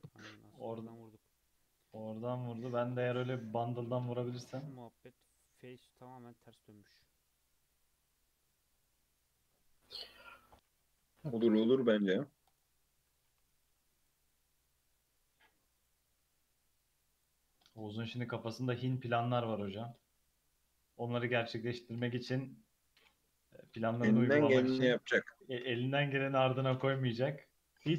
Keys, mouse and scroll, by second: 0.0-2.7 middle drag, 2.7-4.4 drag, 4.4 scroll down 1, 4.6-7.6 middle drag, 7.7-9.5 drag, 9.5 Tab, 10.2 3, 10.7 a, 11.7 alt+n, 13.0 Tab, 13.3 alt+z, 13.7 alt+z, 14.0-14.5 right drag, 14.5-15.2 middle drag, 15.2 scroll up 1, 15.3-16.2 middle drag, 16.2 Tab, 16.6 Tab, 17.1-19.1 drag, 19.1-19.7 middle drag, 19.7 Tab, 19.9-20.3 middle drag, 20.3 Tab, 20.6-23.7 middle drag, 24.4 /, 24.7 scroll down 2, 24.9-25.5 middle drag, 25.5 click, 25.7-27.3 middle drag, 27.3 click, 27.6 middle click, 27.8-27.9 scroll up 3.